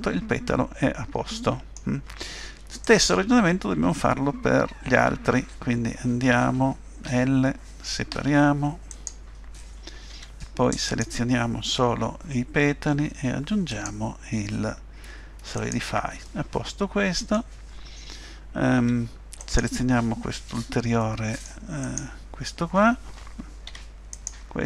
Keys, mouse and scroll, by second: 2.8 click, 5.0 Tab, 7.1 l, 8.1 p, 10.1 Tab, 10.9 click, 13.7 click, 16.3 middle click, 18.8 Tab, 19.4 click, 21.0 middle click, 21.8 click, 23.7 Tab, 24.1 click.